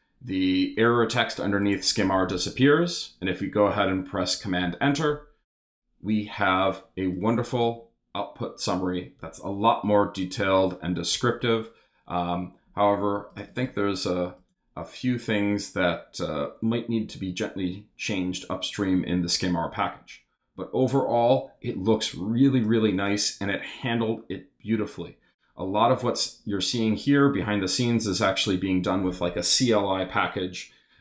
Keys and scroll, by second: 4.6 super+Return.